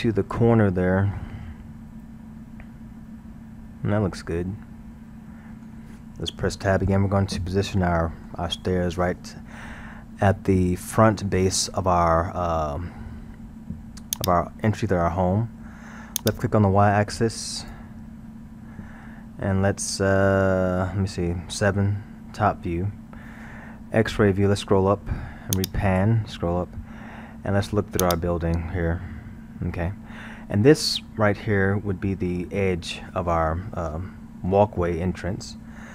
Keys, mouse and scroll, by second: 1.2-4.2 middle drag, 6.8 Tab, 7.7-10.7 middle drag, 14.2 click, 22.2 KP_7, 24.5 scroll, 25.5 click, 26.3-27.6 scroll, 28.0 click, 31.1 scroll.